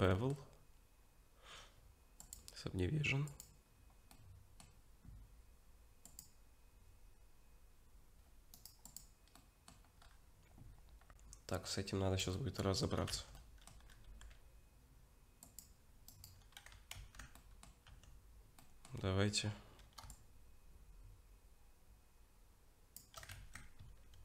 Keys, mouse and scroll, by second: 0.0 middle click, 2.2 click, 4.1 middle click, 6.1 click, 8.5 right click, 9.4 middle click, 10.0-11.6 scroll up 2, 11.6-12.2 scroll up 1, 12.3 shift+middle click, 13.1 Tab, 13.3 middle click, 14.0 ctrl+r, 17.0 ctrl+z, 17.3 middle click, 17.9 Tab, 18.6 middle click, 20.1 shift+click, 23.4 ctrl+z.